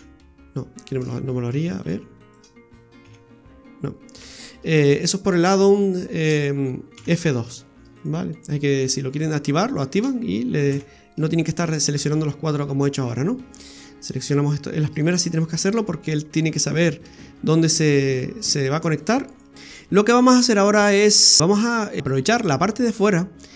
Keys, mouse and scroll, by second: 1.0 ctrl+z, 1.8 right click, 2.2 shift+right click, 3.0 f, 4.2 ctrl+z, 5.4 shift+right click, 5.9 shift+right click, 7.0 f, 7.9 right click, 8.3 shift+right click, 9.1 right click, 9.6 shift+right click, 10.8 f, 11.6 scroll down 1, 12.0 shift+middle click, 13.6 right click, 14.1 shift+right click, 15.1 right click, 15.7 shift+right click, 16.3 shift+right click, 17.0 shift+right click, 17.7 right click, 18.7 shift+right click, 19.6-20.1 scroll down 3.